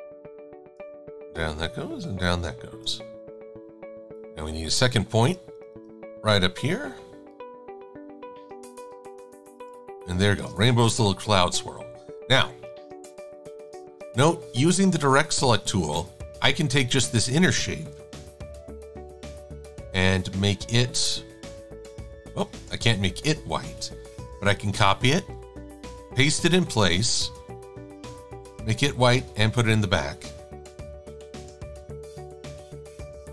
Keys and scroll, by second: 10.1 shift+x, 10.6 shift+super+a, 11.7 a, 21.5 d, 22.7 z, 24.2 super+c, 27.4 d, 28.4 /, 28.9 shift+super+[, 30.2 x, 31.2 super+z, 32.5 x, 32.8 /.